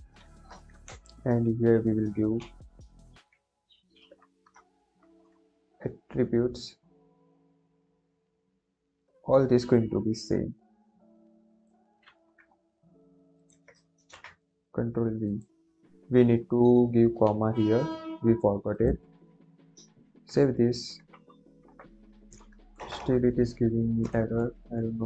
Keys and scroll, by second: 0.0-0.7 typing, 0.8 Left, 2.3 a, 4.8 BackSpace, 12.0 ctrl+c, 13.9 ctrl+v, 17.1 ,, 20.2 ctrl+s, 22.7 BackSpace.